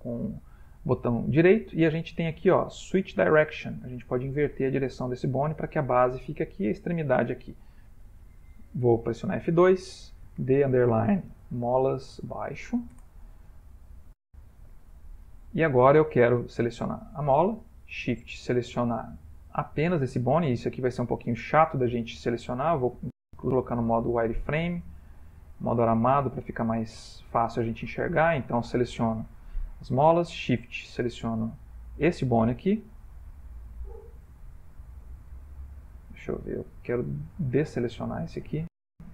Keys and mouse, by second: 6.9 middle click, 7.0 middle click, 9.2 F2, 15.0 Tab, 15.9 middle click, 16.8 click, 18.0 shift+click, 20.0 middle click, 20.3 ctrl+middle click, 22.2 z, 27.1 click, 27.3 middle click, 28.2 click, 30.8 shift+click, 34.5 r, 37.5 Escape, 38.2 click.